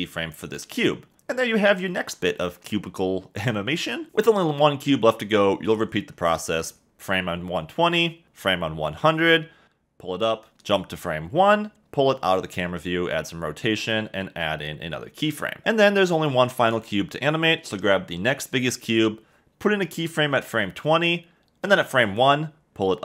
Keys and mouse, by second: 0.3-3.7 typing, 7.8 k, 9.3 g, 9.6 z, 10.6 k, 12.0 g, 12.6 x, 14.2-14.5 typing, 15.9 k, 16.6 space, 20.6 k, 22.7 k.